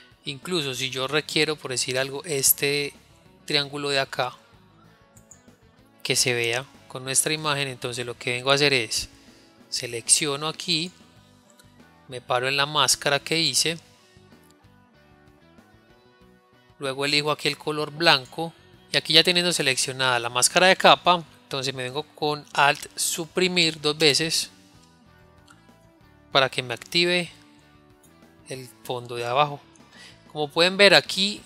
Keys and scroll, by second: 23.1 alt+Delete.